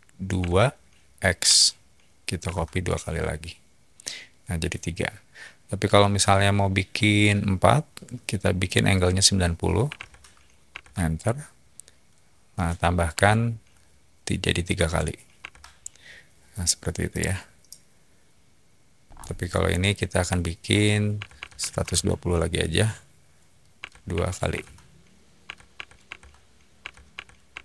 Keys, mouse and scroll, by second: 0.3 2, 1.4 x, 2.4 Return, 9.6-10.4 typing, 10.7 Return, 13.1 3, 14.7 x, 15.4 Return, 17.1-19.1 middle drag, 19.0 scroll, 20.9-22.0 typing, 23.7 2, 24.1 x, 24.5 Return, 25.2-27.3 typing, 26.0 Return, 27.5 Return.